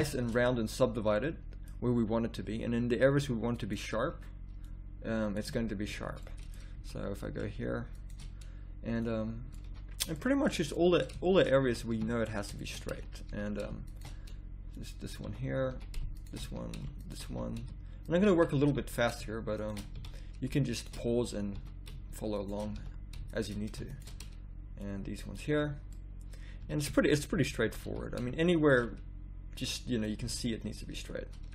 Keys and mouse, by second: 0.5 middle click, 2.5 z, 4.5 middle click, 5.4 z, 5.8 a, 6.7 z, 9.6 z, 11.7 a, 11.9 z, 12.9 z, 13.3 z, 15.2 z, 15.7 a, 16.4 z, 17.3 z, 18.8 z, 19.9-22.8 drag, 19.9 z, 21.6 z, 22.8 z, 26.4 middle click, 26.6 z, 27.3 z, 27.6 z, 27.9 a, 28.5-29.7 drag, 30.2 z.